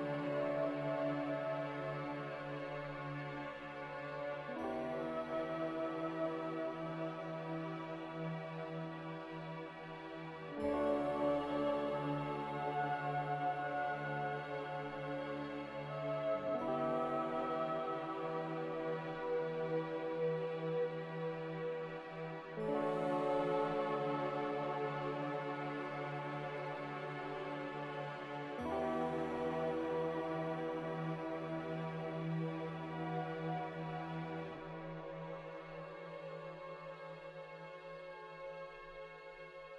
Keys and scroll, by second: 0.1 z, 3.4 Return, 7.5-8.3 typing, 9.6 Return, 16.7 Return, 25.8 a, 32.0 z, 35.5 a, 39.5 z.